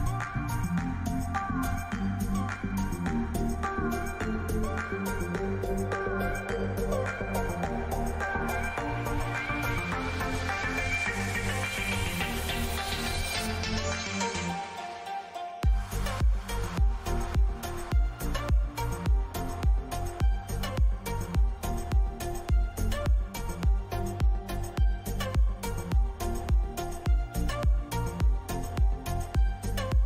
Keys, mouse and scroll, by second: 4.1 middle click, 5.2 a, 7.6-10.4 middle drag, 10.4 k.